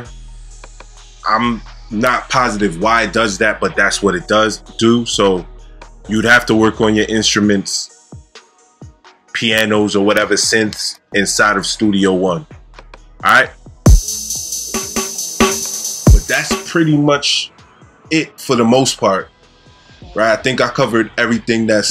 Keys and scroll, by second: 13.8 space, 15.8 space, 16.4 space.